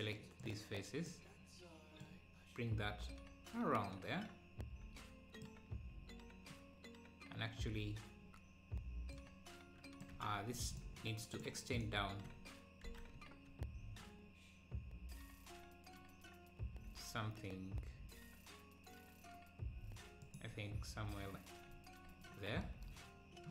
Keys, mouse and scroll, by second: 0.0 click, 2.6 click, 20.5 z.